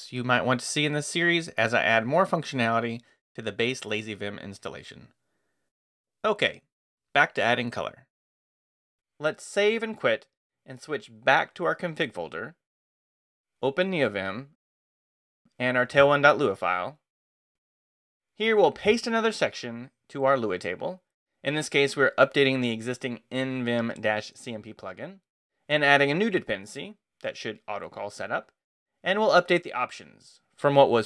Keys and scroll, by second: 9.5 Escape, 9.8-10.8 typing, 14.5 Return, 15.1-17.5 typing, 18.5 o, 19.1 super+v, 19.9 super+Escape, 21.1-22.0 typing.